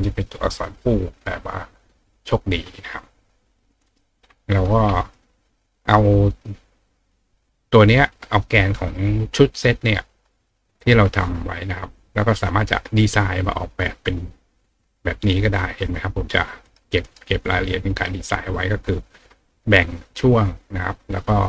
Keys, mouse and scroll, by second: 3.6 click, 3.9 right click, 10.8 right click, 13.4 click, 14.9-16.3 drag, 16.6 right click, 17.0 right click, 18.3 click.